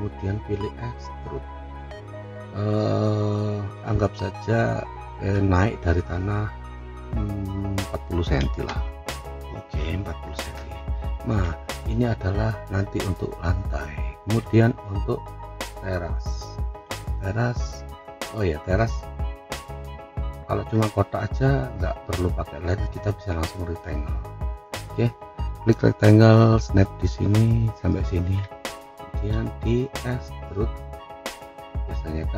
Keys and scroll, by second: 8.6 Return, 11.7 F3.